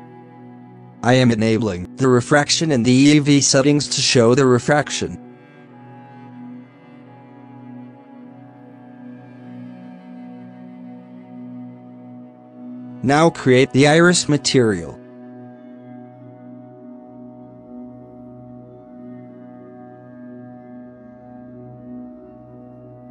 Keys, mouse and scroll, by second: 0.6-6.8 drag, 6.8 scroll down 2, 7.5-9.0 drag, 9.0-9.6 scroll down 2, 9.6 scroll up 2, 9.9 click, 10.2 g, 11.1 scroll down 1, 11.4 click, 11.7 g, 12.7-15.8 drag, 16.4 click, 17.4 scroll up 2, 17.7 scroll down 2, 17.9 a, 18.1 KP_Decimal, 18.5 alt+a, 22.2 scroll up 6, 22.3 shift+a.